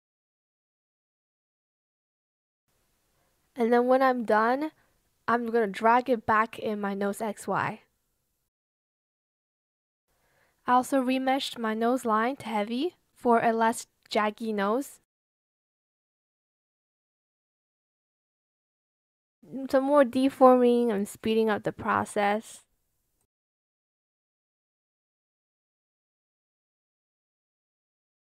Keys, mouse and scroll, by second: 0.3 shift+click, 2.6 ctrl+z, 14.5 shift+click, 15.2 shift+click, 16.0 Escape, 16.6 ctrl+z, 16.8 Escape, 17.8 ctrl+z, 17.9 shift+click, 18.2 shift+scroll, 18.3 shift+Escape, 18.8 ctrl+z, 19.1 shift+click, 19.4 shift+click, 19.7 shift+click, 20.5 ctrl+z, 20.8 Escape, 21.3 ctrl+z, 23.9 ctrl+z, 24.0 shift+click, 24.3 Escape, 24.4 ctrl+z, 24.6 shift+click, 24.8 shift+click, 25.0 Escape, 25.9 ctrl+z, 26.3 shift+click, 26.5 Escape, 27.3 ctrl+z, 27.5 shift+click, 27.7 Escape, 27.9 Escape.